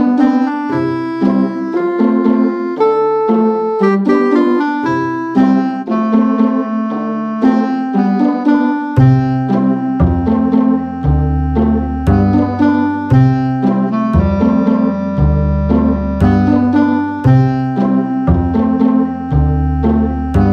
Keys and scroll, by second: 4.7-5.5 typing.